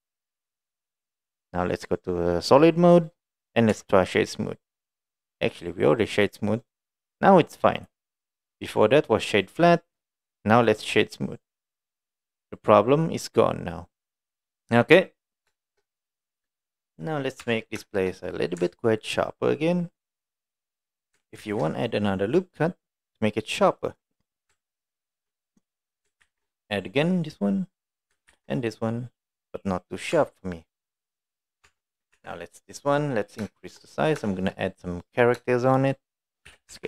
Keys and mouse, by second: 2.6 click, 3.1 middle click, 3.8 Tab, 5.2-5.6 right drag, 5.6-6.2 middle drag, 6.7 middle click, 6.8 middle click, 7.4 middle drag, 7.8 click, 8.2 right click, 9.9 click, 10.2 middle drag, 11.1-12.2 right drag, 12.6-15.1 middle drag, 15.5 shift+middle drag, 15.9-16.2 middle drag, 16.6 middle drag, 17.5 Tab, 17.9 shift+middle click, 18.2 middle click, 18.9 ctrl+middle click, 19.3 middle click, 20.8 middle click, 21.4 ctrl+r, 24.2 middle click, 24.7 ctrl+middle click, 25.7 middle click, 26.3 ctrl+r, 28.3 ctrl+r, 29.9 click, 30.2 Tab, 30.6-31.6 middle drag, 31.7 Tab, 32.2 3, 32.4 click, 32.8 middle click, 33.6 shift+middle click, 34.3 shift+middle click, 34.9 middle click, 35.5 shift+middle click, 36.5 s.